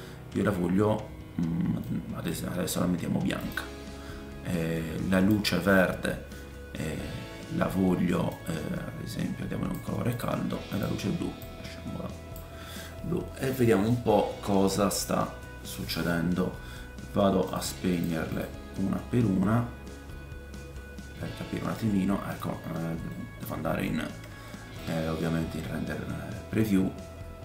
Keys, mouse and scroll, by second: 3.4 click, 5.1 click, 10.1 click, 10.7-14.0 drag, 10.7 middle click, 10.7 right click, 12.8 middle click, 13.4 scroll down 2, 13.9 middle click, 17.9 click, 18.3 click, 20.5-27.4 drag, 23.1 middle click, 24.0-24.3 scroll up 2, 24.4 shift+middle click.